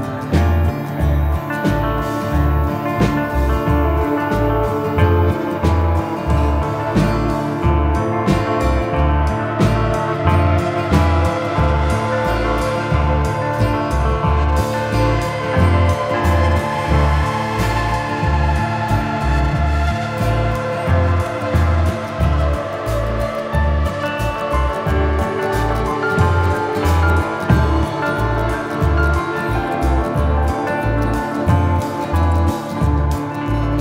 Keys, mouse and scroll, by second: 0.0 click, 1.4 middle click, 2.1 click, 3.4 middle click, 4.0 click, 4.9 click, 6.0 shift+right click, 6.7 shift+right click, 6.9 shift+middle click, 7.4 middle click, 8.0 middle click, 8.8 shift+middle click, 10.1 shift+middle click, 10.9 shift+middle click, 11.6 ctrl+right click, 12.8 ctrl+right click, 13.8 click, 14.2 middle click, 15.2 shift+middle click, 17.0 middle click, 18.0 middle click, 19.8 click, 20.4 middle click, 23.0 shift+right click, 23.5 shift+middle click, 24.6 click, 25.2 shift+middle click, 25.4 shift+middle click, 25.6 middle click, 26.6 shift+middle click, 29.1 middle click, 29.2 right click, 29.6 ctrl+right click, 30.2 ctrl+middle click, 31.1 shift+middle click, 31.2 shift+right click, 32.0 shift+middle click, 32.5 click.